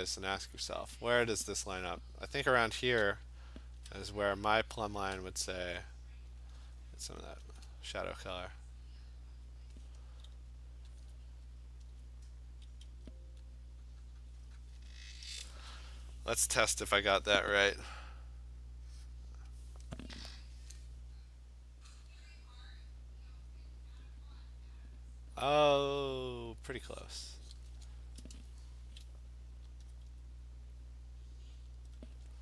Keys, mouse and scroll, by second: 3.8 alt+click, 5.1 click, 5.7 alt+click, 7.5 alt+click, 9.8 click, 11.1 alt+click, 12.9 ], 14.8 click, 18.7 click, 19.6 click, 20.8 click, 25.6 click, 27.6 click, 29.9 alt+click, 31.7 click, 32.3 /.